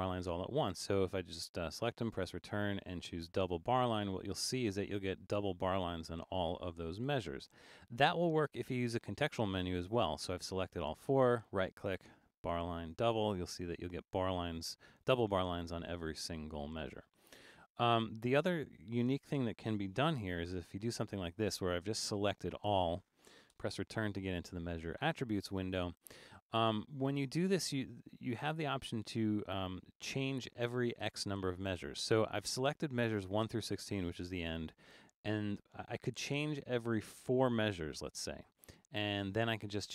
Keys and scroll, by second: 7.6 super+z, 17.8 super+z, 19.0 super+a, 20.1 super+-, 20.8 super+-, 23.6 Return, 37.6 4.